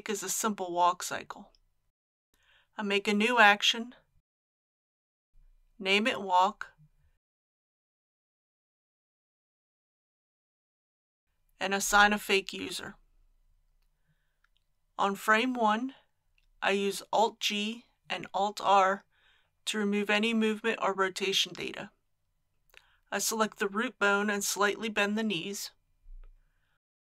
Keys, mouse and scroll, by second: 2.3 click, 7.2-7.7 typing, 8.2 Return, 11.7 click, 18.2 alt+g, 18.9 alt+r, 22.5 click, 24.2 g.